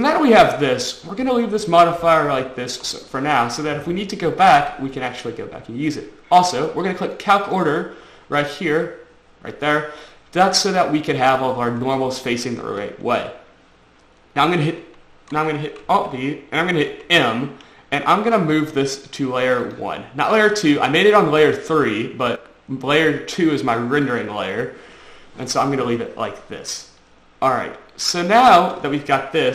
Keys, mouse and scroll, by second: 17.1 m, 19.9 click, 24.4 click, 25.3-25.7 scroll up 2, 25.8-26.4 scroll down 2, 26.4 scroll up 1, 28.1 shift+middle click.